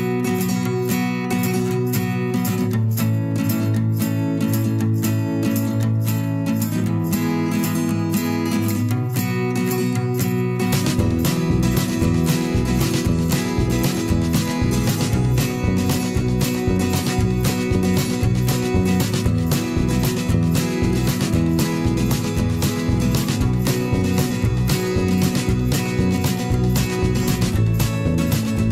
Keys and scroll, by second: 2.0 ctrl+[, 2.9 ctrl+], 4.3 ctrl+shift+[, 4.5 ctrl+], 5.3 ctrl+[, 7.5 ctrl+shift+[, 7.7 ctrl+], 9.6 shift+Up, 9.8 shift+Down, 9.9 shift+Up, 12.8 ctrl+], 18.1 ctrl+shift+[, 18.2 ctrl+], 19.4 ctrl+shift+[, 19.6 ctrl+], 20.2 ctrl+], 21.2 ctrl+], 24.5 ctrl+], 25.6 ctrl+shift+[.